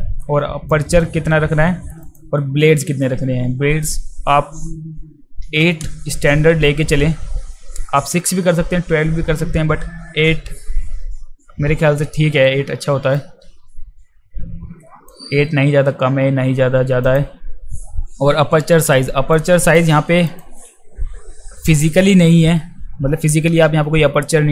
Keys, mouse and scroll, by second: 0.7 click, 2.1 click, 13.2 click, 17.0 click, 19.3 click, 20.3 click.